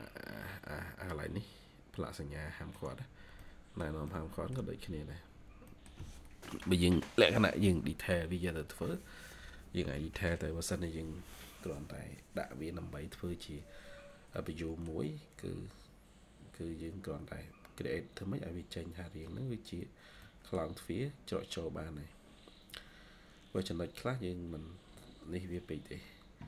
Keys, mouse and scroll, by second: 2.8 middle click, 2.8 scroll up 1, 2.9 scroll down 1, 3.3 middle click, 4.6 middle click, 4.6 scroll up 1, 4.8 scroll down 1, 5.6 middle click, 13.9 scroll down 1, 14.2 middle click, 14.8 scroll down 1, 19.0 scroll down 1, 20.1 middle click, 20.8 scroll up 1.